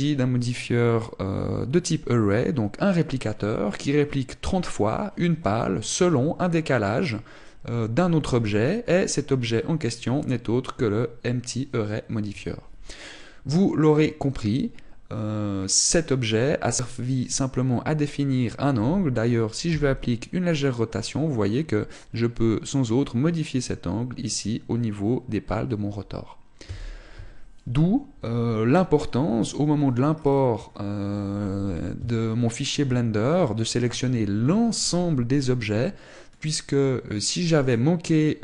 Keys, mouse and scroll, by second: 20.1 r.